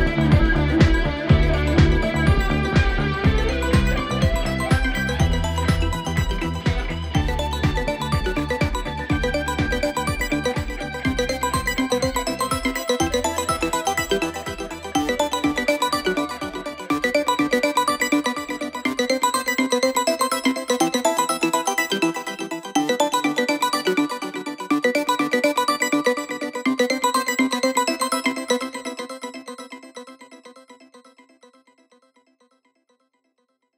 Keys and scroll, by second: 0.5 ], 22.0 ], 30.3 ], 31.0 ], 31.5 ].